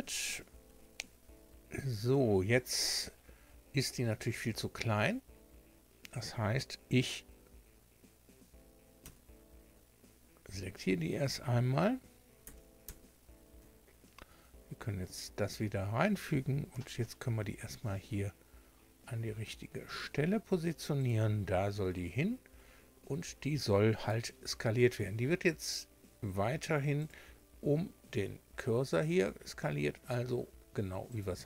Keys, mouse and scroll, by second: 0.5 Tab, 1.4-2.2 scroll down 4, 2.7-3.6 scroll down 4, 3.7-4.5 scroll up 4, 4.8-5.1 scroll up 2, 9.0 1, 10.2 scroll down 2, 12.4 a, 12.8 a, 14.2 shift+2, 16.7 g, 21.0 click, 21.4-22.4 scroll down 4, 22.6 scroll up 2, 24.0 s, 27.0 click, 29.8 s, 31.1 click.